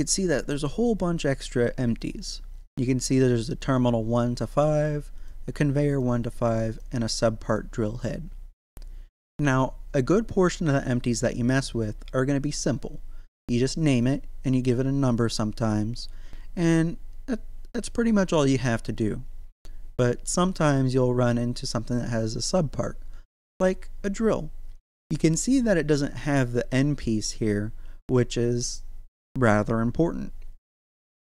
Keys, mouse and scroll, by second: 3.7 click, 13.9 click, 23.5 right click, 25.2-31.2 middle drag.